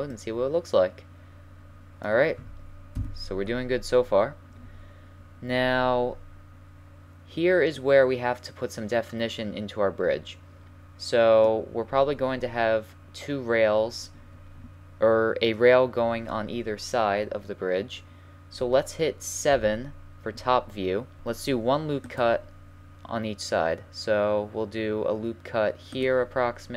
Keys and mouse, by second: 2.9 KP_1, 7.7 middle click, 9.6 middle click, 11.2-12.2 middle drag, 12.3-14.3 middle drag, 19.5 KP_7, 21.2 ctrl+r.